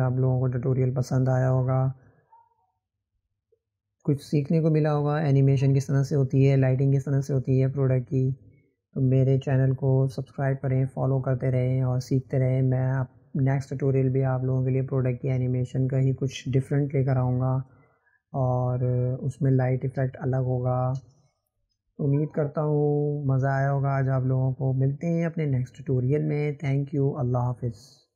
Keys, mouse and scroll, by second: 1.1-4.1 drag, 16.5-25.4 drag, 27.0 click.